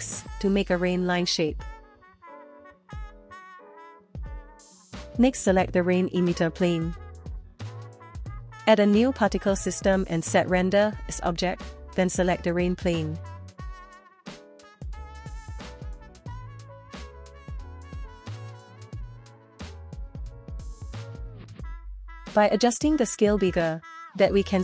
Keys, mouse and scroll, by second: 1.4 click, 2.0 click, 2.2 click, 2.9 click, 3.0 Tab, 3.2 scroll down 1, 4.2 shift+middle click, 4.6 click, 6.1 click, 7.9 click, 9.4 click, 10.9-13.5 drag, 14.0 click, 14.7-15.8 drag, 17.1 click, 22.3-24.1 drag.